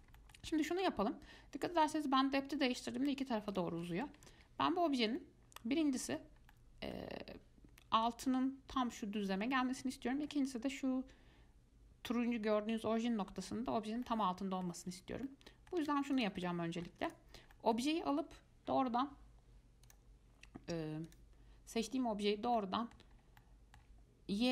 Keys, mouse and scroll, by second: 2.0-5.4 drag, 5.4-12.7 middle drag, 14.2-15.1 middle drag, 15.1 Tab, 15.5 middle click, 16.0 Tab, 16.4 click, 16.7 middle click, 17.3 click, 17.7-20.1 middle drag, 20.1 click, 21.3 click, 22.8-23.4 middle drag, 23.4 scroll up 1, 23.6-24.5 middle drag.